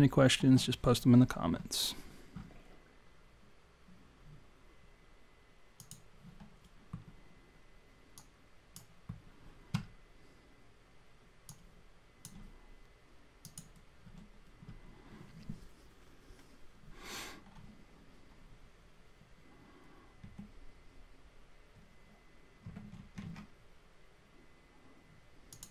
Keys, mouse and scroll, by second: 6.1 click, 8.2 click, 11.6 click.